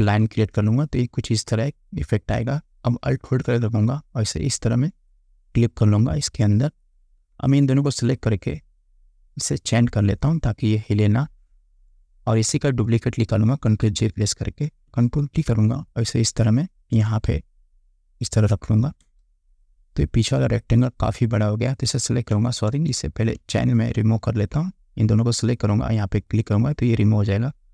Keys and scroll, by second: 13.9 ctrl+j, 15.3 ctrl+t, 19.1 Return, 22.0 ctrl+t, 22.8 Return.